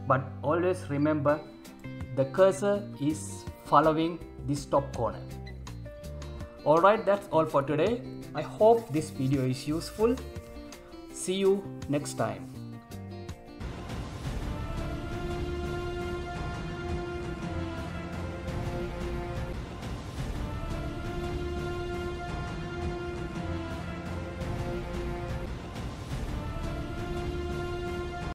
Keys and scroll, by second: 7.4 Escape.